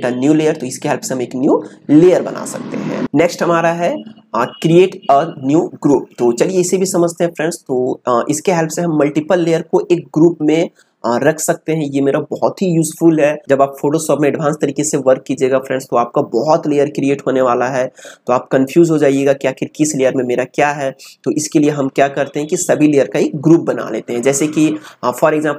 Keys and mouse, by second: 3.0 ctrl+z.